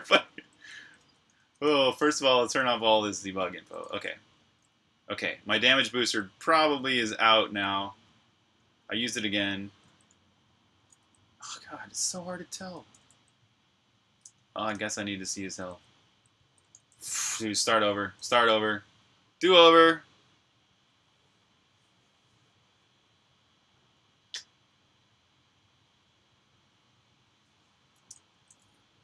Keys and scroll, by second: 0.0-2.4 typing, 3.4-5.8 typing, 7.5-17.0 typing, 17.2 super+q, 18.7 super+r, 19.1-20.1 typing, 19.6 super+h, 20.3 super+h, 27.7-29.0 typing.